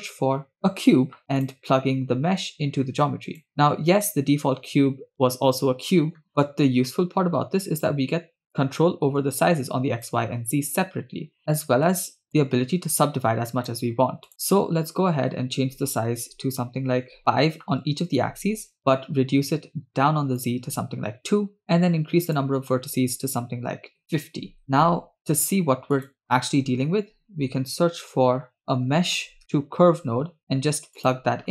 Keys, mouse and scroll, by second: 2.5-3.4 drag, 6.2-7.1 scroll up 1, 7.1 scroll up 1, 8.5-10.1 shift+drag, 12.3-14.3 shift+drag, 14.3-17.2 shift+drag, 18.8-20.6 drag, 21.7-24.0 shift+drag, 24.0 BackSpace, 24.6 click, 25.2 shift+a.